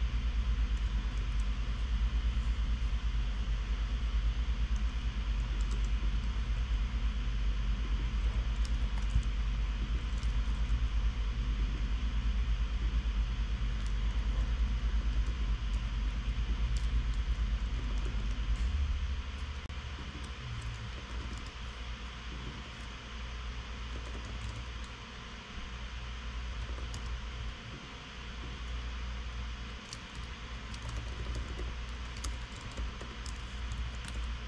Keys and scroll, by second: 1.5 shift+super+Left, 1.7 super+v, 6.2 Tab, 7.0 super+x, 8.7 super+x, 9.3 shift+End, 9.6 super+x, 10.5 super+x, 10.8 shift+End, 11.1 super+x, 14.7 alt+shift+End, 15.2-19.3 typing, 17.7 alt+shift+Right, 20.9 super+r, 21.2-22.4 typing, 23.2 super+r, 24.2-25.4 typing, 26.8-27.9 typing, 30.6 alt+Left, 31.1 alt+shift+Right, 31.4-34.0 typing, 32.8 alt+BackSpace, 34.3 alt+shift+Left.